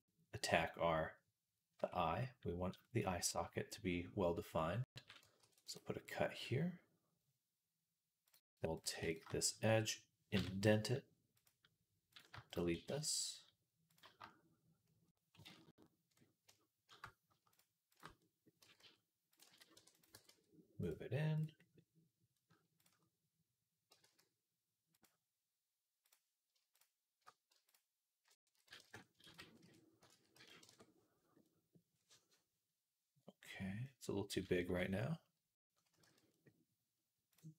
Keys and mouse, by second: 1.6 Tab, 5.2 ctrl+r, 5.6-8.2 drag, 10.2 i, 12.5 x, 15.3 ctrl+z, 17.8 click, 18.0-21.4 middle drag, 18.5 g, 19.3 ctrl+z, 19.6 e, 20.0 g, 21.5-25.9 middle drag, 23.7 g, 25.9 click, 26.6-28.9 alt+shift+middle drag, 28.4 s, 28.9-32.1 ctrl+drag, 29.1 ctrl+z, 29.4 ., 30.0 s, 33.3-36.1 middle drag, 35.9 z, 36.1-37.2 drag, 37.2-37.5 middle drag.